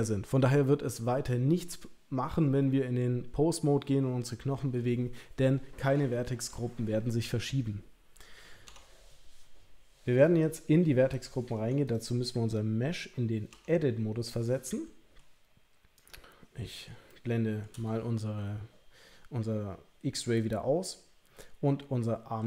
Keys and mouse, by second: 8.7 Tab, 11.7 Tab, 13.5 Tab, 14.3 middle click, 16.1 click, 17.1 shift+middle click.